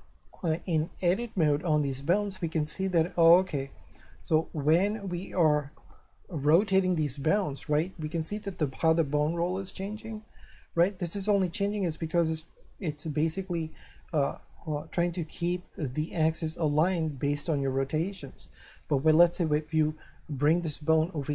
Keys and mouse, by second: 0.2 click, 1.7 middle click, 3.0 shift+middle click, 4.7 right click, 7.0 r, 8.4 right click, 10.3 middle click, 12.4 r, 19.4 click, 20.0 middle click.